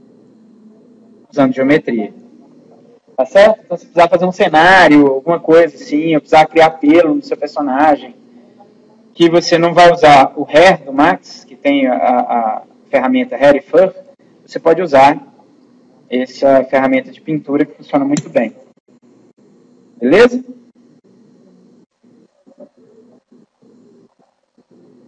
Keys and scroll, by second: 18.1 Delete, 21.8 Escape.